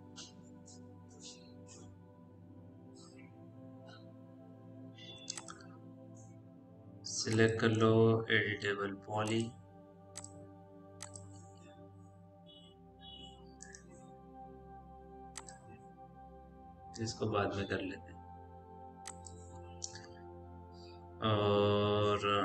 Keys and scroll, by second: 18.0 Delete.